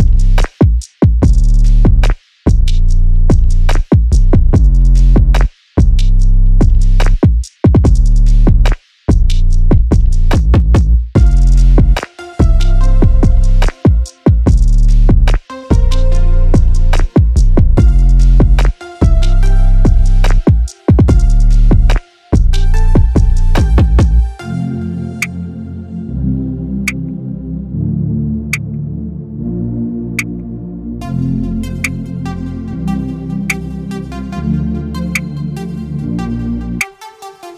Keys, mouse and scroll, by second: 1.4-36.3 drag.